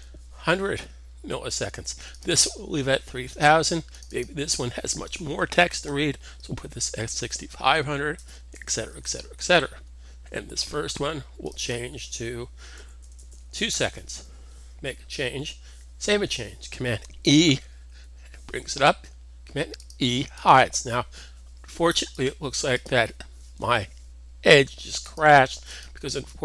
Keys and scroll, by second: 6.2-8.5 typing, 12.4-13.1 typing, 15.1 super+s, 17.7 super+e.